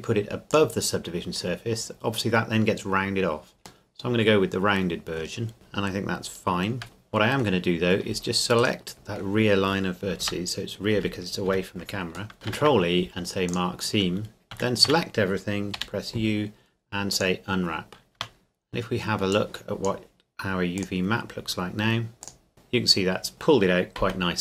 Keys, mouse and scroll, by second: 0.5 click, 3.9 middle click, 5.3 scroll down 1, 5.5 middle click, 7.7-8.1 scroll up 1, 8.6 alt+right click, 8.9 middle click, 10.2 KP_0, 10.9 z, 11.5 z, 12.3 scroll up 1, 12.5 ctrl+e, 13.5 click, 14.5 a, 14.9 a, 15.8 u, 17.1 click, 18.1 Tab, 19.3 click, 22.2 click, 22.5 Tab.